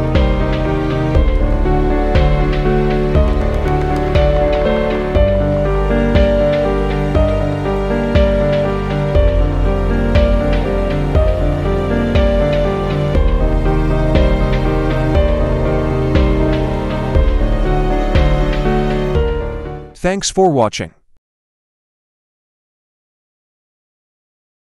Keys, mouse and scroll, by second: 0.2-1.9 typing, 3.5-6.3 typing, 7.9 click, 9.7 right click, 11.6 click, 13.2 click, 14.0 scroll up 1, 15.8-16.2 scroll down 1, 18.0 scroll up 1.